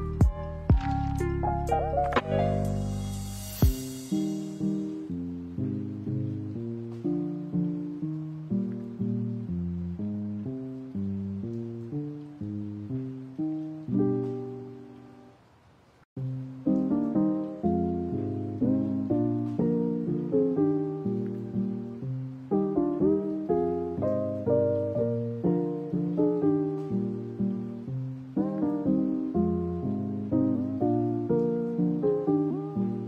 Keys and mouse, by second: 0.1 g, 1.8 middle drag, 3.0-4.4 drag, 4.7 middle click, 5.3 middle click, 7.5 click, 8.2 x, 15.0 middle click, 16.2-17.8 middle drag, 18.3 middle click, 20.4 click, 23.5-27.0 drag, 27.0 middle click, 27.9 g, 28.5 a, 29.0 middle click, 29.8 g, 30.6 middle click, 31.0 middle click.